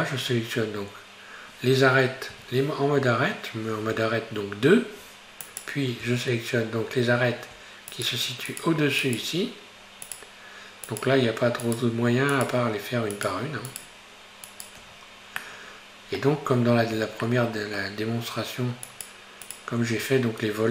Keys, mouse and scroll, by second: 2.3 2, 5.5 right click, 8.0 shift+right click, 8.5 shift+Right, 8.5 right click, 9.0 shift+Right, 9.0 right click, 10.1 shift+Right, 10.1 right click, 10.9 shift+Right, 10.9 right click, 11.7 shift+Right, 11.7 right click, 12.4 shift+Right, 12.4 right click, 13.2 shift+Right, 13.2 right click, 13.7 shift+Right, 13.7 right click, 14.5 shift+right click, 14.9-15.5 scroll down 4, 15.5-16.5 middle drag, 16.5-17.3 scroll up 3, 17.3-18.9 shift+middle drag, 18.9 shift+right click, 19.5 shift+right click, 19.9-20.7 scroll down 4.